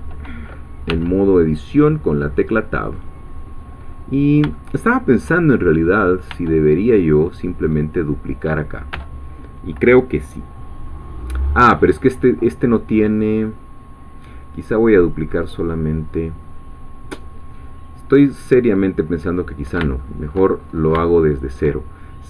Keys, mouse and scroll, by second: 3.0 click, 4.0-4.3 scroll down 2, 4.5 shift+middle click, 6.3 Tab, 6.9-8.9 drag, 9.0 Tab, 20.0 shift+middle click, 20.6-21.0 shift+scroll up 2, 21.1-22.1 shift+middle drag.